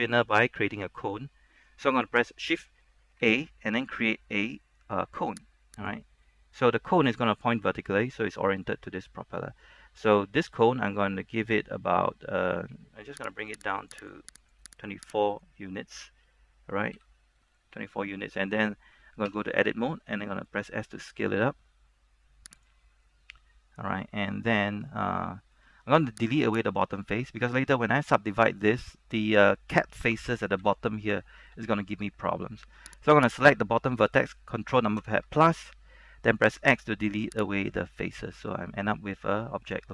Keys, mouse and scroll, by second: 5.9 click, 5.9 shift+a, 6.4 middle click, 6.9-8.2 scroll up 1, 8.2-9.2 scroll down 1, 9.2-13.5 scroll up 1, 13.5 click, 17.1 z, 17.4 scroll up 1, 17.6 shift+middle click, 18.3 scroll up 1, 19.4 Tab, 20.6 s, 22.7 click, 22.9 scroll down 1, 23.1-26.7 middle drag, 26.7 right click, 30.8 z, 31.4 shift+middle click, 31.9-33.1 scroll up 1, 33.1 right click, 35.1 ctrl+KP_Add, 36.6 x, 37.8 click, 38.2-39.9 middle drag.